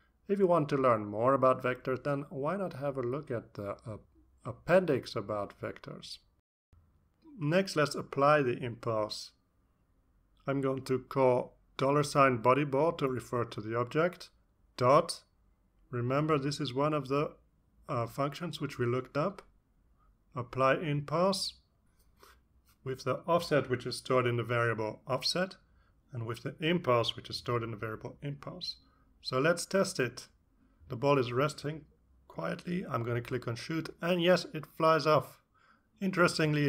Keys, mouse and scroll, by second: 1.4 click, 1.8-7.8 typing, 7.9 Left, 8.1 Down, 8.4 Up, 8.6 Left, 8.8 Left, 9.1 Down, 9.2 Down, 11.5 shift+4, 12.1 shift+b, 12.6 Return, 12.9 ., 15.7-16.7 typing, 16.9 Down, 17.0 Down, 17.5 Return, 18.9 o, 19.4 BackSpace, 21.6 click, 22.6 ctrl+space, 23.4-26.8 typing, 27.2 ctrl+s, 30.0 click, 32.2 click, 33.8 click.